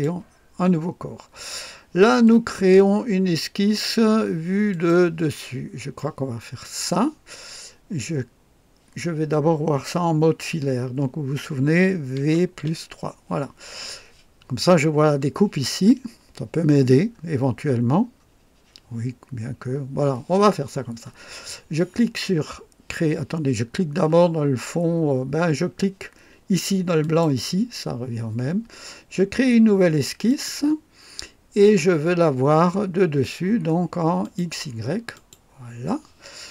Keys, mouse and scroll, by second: 2.2-3.9 drag, 4.7 click, 5.5 scroll up 1, 6.0-6.8 right drag, 12.2 v, 12.6 KP_3, 15.5-15.9 scroll up 2, 17.1 scroll up 2, 27.0 click, 30.3 click, 34.2 click, 35.1 click.